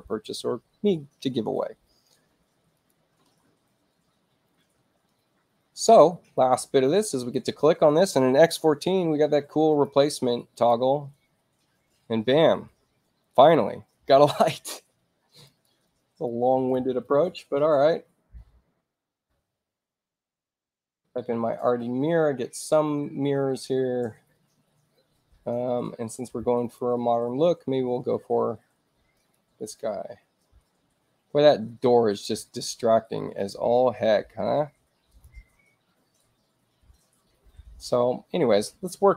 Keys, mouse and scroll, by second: 2.7 click, 7.1 click, 9.7 click, 10.5 click, 15.4 click, 16.2-18.0 typing, 23.4-24.4 middle drag, 23.4-24.4 scroll down 2, 26.5 click, 29.1 click, 32.4 space, 33.3 click, 34.4 i, 35.0 click.